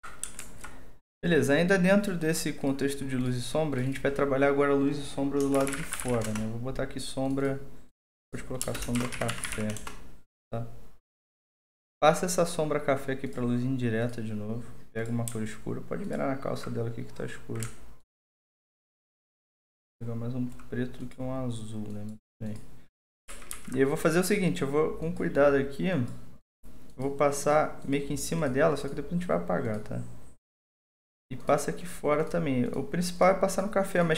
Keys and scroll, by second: 0.4 alt+2, 5.3-6.6 typing, 8.6-10.0 typing, 23.2 ctrl+z, 23.5 ctrl+z.